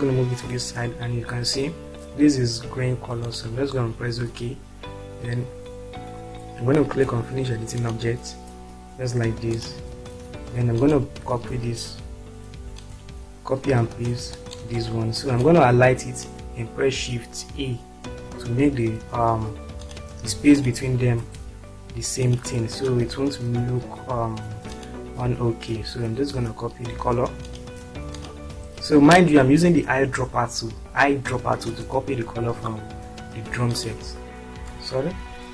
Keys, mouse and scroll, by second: 7.7 click, 9.6 click, 10.8 click, 13.1 ctrl+click, 14.3 ctrl+click, 17.7 shift+a, 19.8 click, 21.2 click, 24.7 click, 33.8 click, 35.1 ctrl+z.